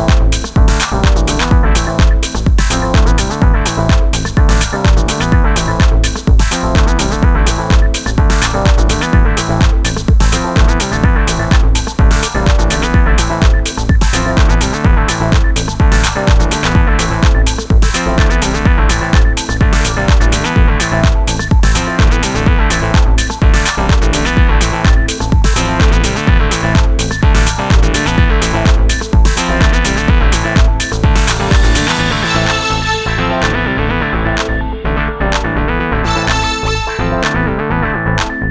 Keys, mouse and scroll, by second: 0.6 z, 4.2-5.1 middle drag, 5.1 x, 9.6 Tab, 11.0 Tab, 11.6 Tab, 21.5 Tab, 27.4-27.8 right drag, 27.8 Tab, 28.9 Tab, 29.5 right click, 29.9 Tab, 36.8 s.